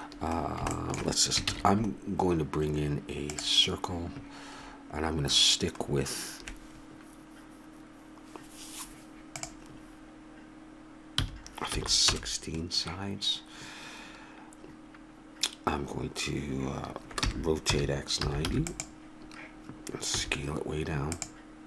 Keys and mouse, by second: 1.5 shift+a, 9.4-11.3 drag, 17.2 r, 20.2 s.